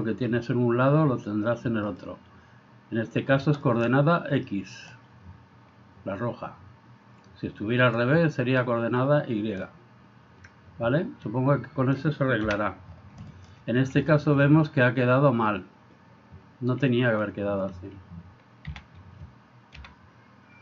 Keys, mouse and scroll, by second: 1.9 click, 3.7 middle click, 9.7-12.1 middle drag, 13.4 middle click, 14.1 middle click, 18.7 a, 19.9 g.